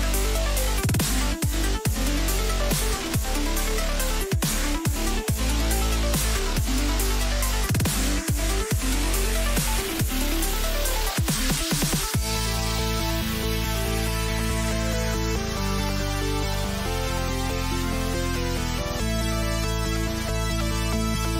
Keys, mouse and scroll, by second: 1.3 a, 1.6 a, 2.2 middle click, 4.2 k.